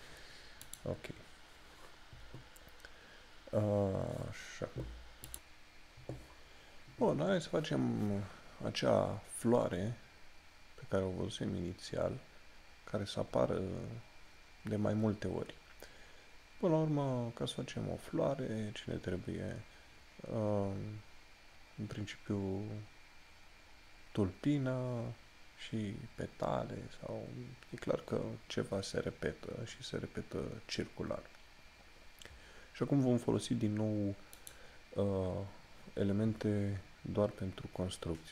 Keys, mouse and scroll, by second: 5.4 click, 34.6 click.